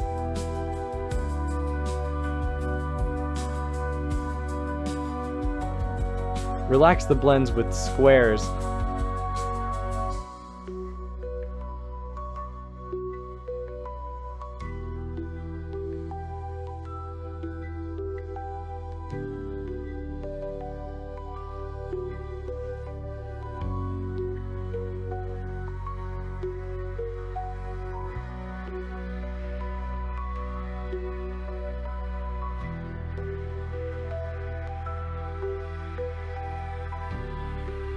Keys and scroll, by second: 5.9 ctrl+r, 9.5 ctrl+r, 17.9 ctrl+r, 21.4 ctrl+r, 32.5-33.6 typing, 37.7 Return.